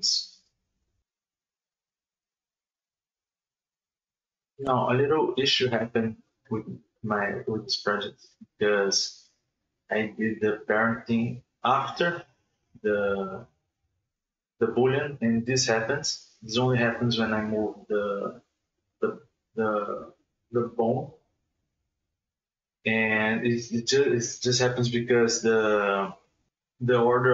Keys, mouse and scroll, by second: 0.0 h, 0.1-0.4 middle drag, 0.4 right click, 0.6 right click, 0.7 middle drag, 0.9 ctrl+click, 2.1 right click, 2.7 shift+right click, 5.2 ctrl+p, 8.6 Tab, 9.0 right click, 9.3 r, 11.1-12.2 middle drag, 12.2 ctrl+z, 13.4 right click, 13.7 Tab, 14.2 right click, 14.5 right click, 14.8 right click, 15.3 shift+right click, 16.5 shift+a, 19.8 q, 20.9 ctrl+a, 22.0 alt+a, 22.7 ctrl+z, 23.3 shift+a, 24.8 Tab, 26.7-27.3 scroll down 1.